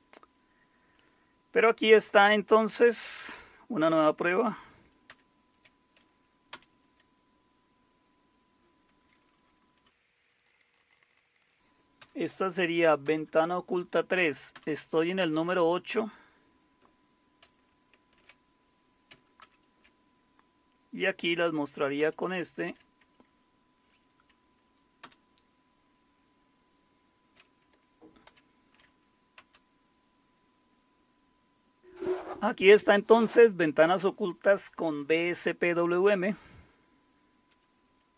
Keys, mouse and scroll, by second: 5.1 super+8, 6.5 super+Return, 8.1 click, 10.0-12.0 typing, 13.0 typing, 14.3-15.0 typing, 19.4 ctrl+super+o, 22.0 ctrl+super+u, 25.0 Return, 28.3 ctrl+super+u, 29.4 Return.